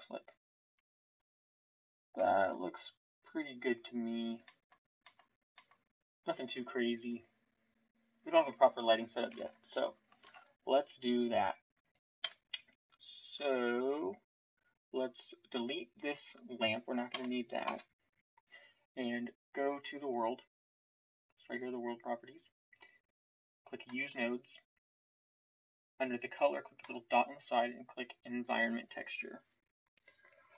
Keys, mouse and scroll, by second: 9.3 shift+z, 10.2 ctrl+s, 12.2 KP_1, 17.1 Delete.